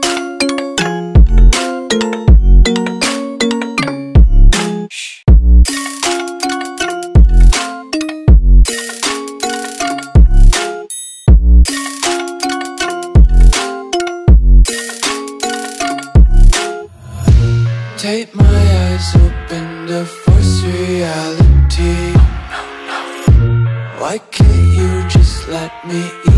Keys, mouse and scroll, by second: 3.3 Return, 5.1 alt+scroll up 1, 5.7 alt+scroll up 2, 6.1 scroll down 1, 7.1 scroll down 1, 9.5 Delete, 11.4 click, 22.4 alt+scroll up 2, 23.3 scroll up 1, 24.1 Return, 25.6 click.